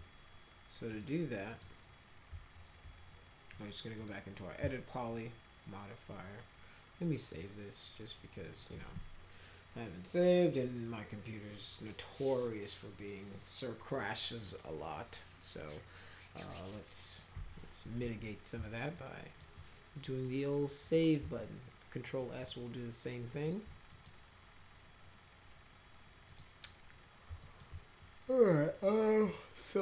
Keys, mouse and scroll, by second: 0.9 click, 1.5 click, 4.0 click, 7.3 click, 8.3 click, 18.9 alt+middle click, 20.8 click, 21.4 alt+middle click, 22.4 alt+middle click, 23.9 middle click, 26.3 click, 27.4 alt+middle click, 29.2 click.